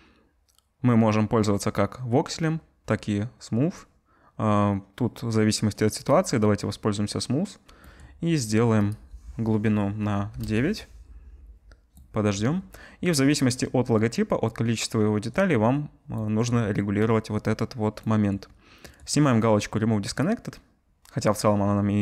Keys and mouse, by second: 6.0-8.8 drag, 8.8-20.7 middle drag, 20.7-22.0 drag.